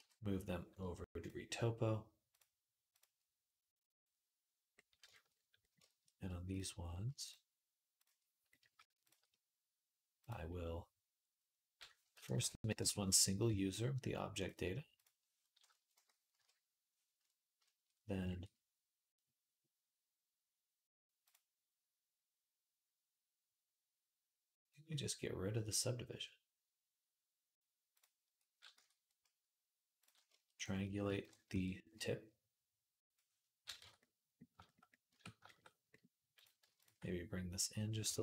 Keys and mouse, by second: 2.2-4.5 drag, 4.5-7.8 middle drag, 7.8 shift+click, 7.9-21.0 shift+middle drag, 10.0 click, 10.0 right click, 12.0 F3, 16.1 KP_Decimal, 21.0 click, 21.1-24.4 middle drag, 24.4 click, 24.5-27.7 middle drag, 27.7-29.8 drag, 28.5 Tab, 29.8 middle click, 30.3 click, 31.0 ctrl+KP_Add, 31.3 q, 33.6 Tab, 34.9 Tab, 36.6 alt+shift+click, 37.9 shift+Tab.